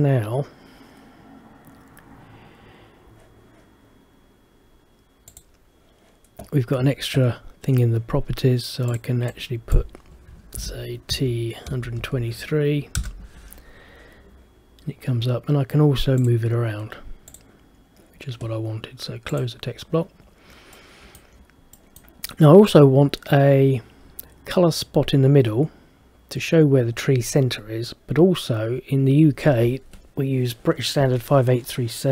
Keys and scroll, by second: 10.7 shift+t, 13.1 Return.